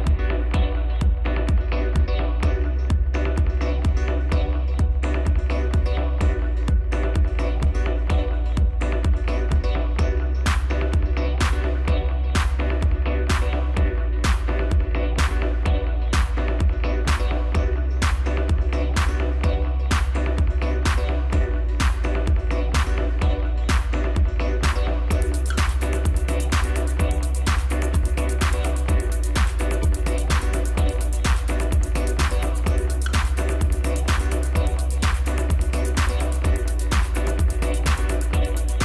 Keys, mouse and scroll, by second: 0.0-1.2 drag, 1.6 drag, 2.2 click, 3.1 Tab, 3.3 a, 4.0 s, 5.3-5.9 scroll up 1, 5.9 g, 7.4-7.8 scroll up 1, 7.8 Tab, 8.3-8.8 middle drag, 8.8 scroll up 1, 9.0 Tab, 9.4-9.9 middle drag, 9.9-10.7 scroll up 6, 10.9 3, 11.9 click, 13.3 ctrl+KP_Add, 14.5 x, 16.2 2, 16.9 click, 18.0 click, 18.2 click, 18.8-19.3 scroll down 1, 19.3 KP_1, 19.9-20.8 scroll down 3, 20.8 e, 22.7 g, 24.4-24.8 scroll down 1, 24.8 middle click, 25.2-26.9 scroll up 5, 27.1 3, 27.5 click, 28.0-28.7 scroll down 1, 28.7 KP_1, 29.3-29.8 scroll down 2, 29.8 e, 33.9-34.7 scroll up 3, 35.0-35.8 scroll down 2, 37.6 click, 37.8 click, 38.5 scroll up 2.